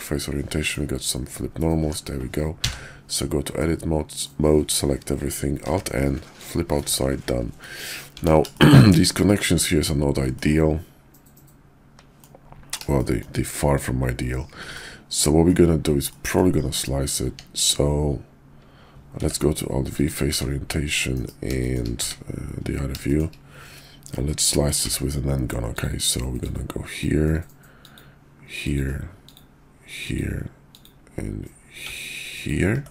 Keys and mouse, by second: 0.6 middle click, 1.7 Tab, 2.6 a, 3.5 middle click, 5.6 alt+n, 6.8 Tab, 7.5 click, 8.1 Tab, 8.5 shift+click, 8.9 click, 10.3-11.4 drag, 11.4 middle click, 12.9 shift+middle click, 14.7 middle click, 16.1 middle drag, 17.2 Tab, 19.1 alt+v, 20.3 `, 21.1 KP_5, 21.6 shift+middle drag, 21.9 `, 23.0 shift+drag, 24.7 d, 26.4-27.0 drag.